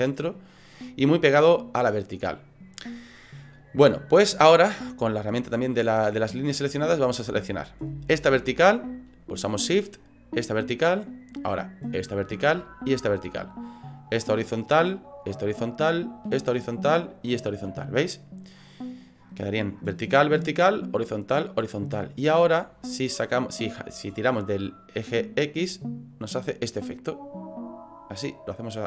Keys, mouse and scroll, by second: 0.0 middle click, 5.3 click, 6.6 middle click, 7.9 right click, 10.3 shift+right click, 12.0 shift+right click, 13.0 shift+right click, 14.1 shift+right click, 15.2 shift+right click, 16.4 shift+right click, 17.2 shift+right click, 17.8 middle click, 21.8 middle click, 25.0 click.